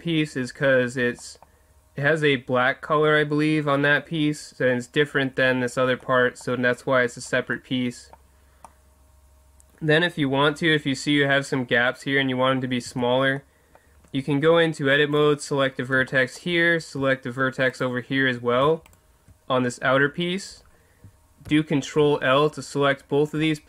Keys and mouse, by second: 1.2-5.9 middle drag, 6.0-7.9 middle drag, 8.7-11.2 middle drag, 12.9 Tab, 13.4 middle click, 15.1-16.5 right drag, 17.7-20.7 right drag, 20.7 middle click, 21.5 ctrl+l.